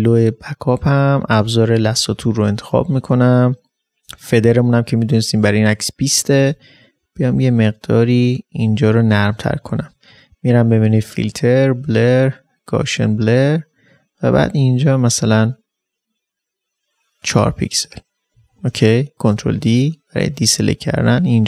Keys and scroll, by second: 18.3 ctrl+d, 18.8 space.